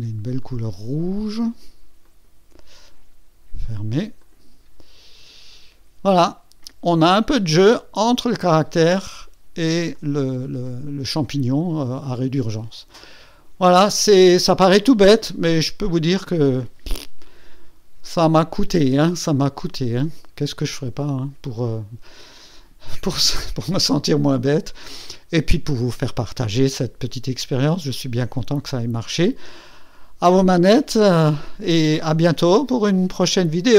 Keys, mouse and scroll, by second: 0.4 click, 2.0 click, 3.6 click, 4.2 click, 4.9-5.4 scroll up 1, 6.7 scroll up 2, 8.8-9.1 scroll down 2, 9.9-12.6 drag, 12.9 click, 13.4 scroll down 2, 14.7-15.1 scroll up 4, 15.4-15.7 scroll down 4, 16.1 right click, 25.0 scroll up 2.